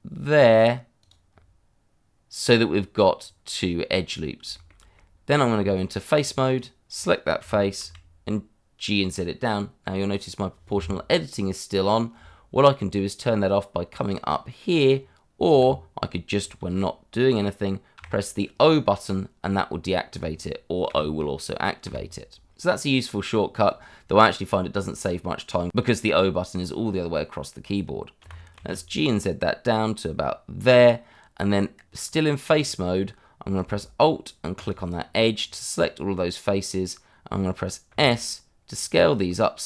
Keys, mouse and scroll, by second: 1.1 click, 1.3 scroll down 1, 3.2 scroll up 1, 4.5 shift+middle click, 4.7 middle click, 5.5 Tab, 6.4 click, 7.4 g, 7.8 z, 15.5 Escape, 18.0 o, 20.9 o, 27.8-28.2 scroll up 1, 28.2 g, 28.5 z, 30.6 click, 31.1 middle click, 31.8 Tab, 34.5 click, 35.4 scroll down 1, 35.7 middle click, 37.9 s.